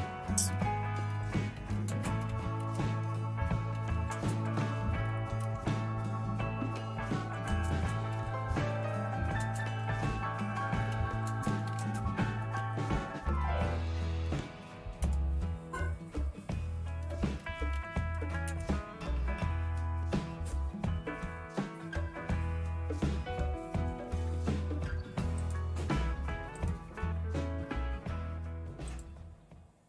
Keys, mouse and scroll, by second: 0.3-6.0 typing, 7.2-13.8 typing, 15.0-15.7 typing, 17.1-21.6 typing, 18.6 Return.